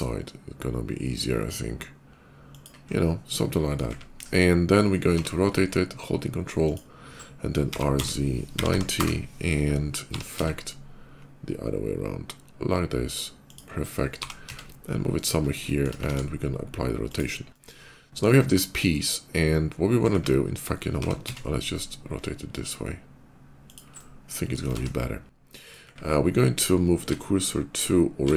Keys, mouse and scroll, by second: 2.3 click, 2.5 scroll down 2, 2.9 middle click, 4.0 KP_5, 4.2 middle click, 5.0 r, 5.9 ctrl+r, 6.5 click, 7.4 r, 7.8 z, 8.4 9, 8.5 0, 8.8 Return, 9.9 r, 10.2 z, 11.0 ctrl+r, 13.3 ctrl+click, 13.9 g, 14.1 z, 14.3 g, 15.0 click, 15.4 shift+middle click, 15.9 ctrl+a, 16.8 click, 17.3-19.8 middle drag, 20.8 r, 20.9 z, 23.5 ctrl+click, 23.8 ctrl+middle click, 24.5 ctrl+a, 25.3 click, 25.6 c, 26.1 middle click, 26.9 shift+s, 27.5 shift+s.